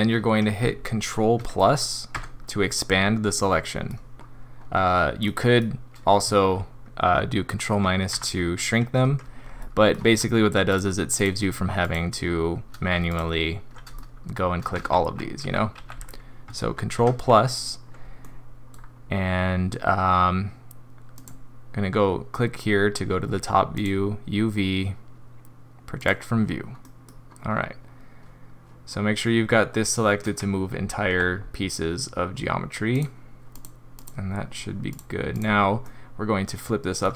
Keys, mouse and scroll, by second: 2.1 ctrl+KP_Add, 3.3 middle click, 4.4-5.1 scroll up 2, 5.2 middle click, 8.1 ctrl+KP_Subtract, 9.6 middle click, 10.7 shift+click, 11.1 shift+click, 11.8 shift+click, 13.1 alt+click, 13.9 middle click, 14.4 scroll down 1, 14.8 ctrl+z, 15.1 ctrl+z, 15.4 ctrl+z, 15.8 ctrl+z, 17.0 ctrl+KP_Add, 18.2 middle click, 18.7 scroll down 2, 21.1 click, 23.7 click, 26.8 middle click, 27.0 scroll up 2, 31.1 g, 33.5 click, 34.0 click, 34.9 click, 35.3 click, 35.8 middle click.